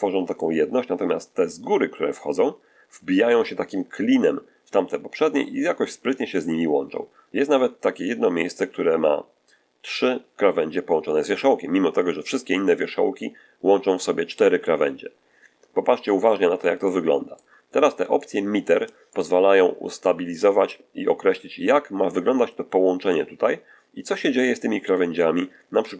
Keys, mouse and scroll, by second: 5.3-6.1 scroll up 2, 6.4-6.9 scroll up 2, 7.2-7.6 scroll up 2, 13.7-14.3 scroll down 4, 14.6-15.0 scroll down 2, 15.3 shift+middle click, 16.9 shift+middle click, 18.1-19.5 shift+middle drag, 19.5 middle click, 23.9 middle click.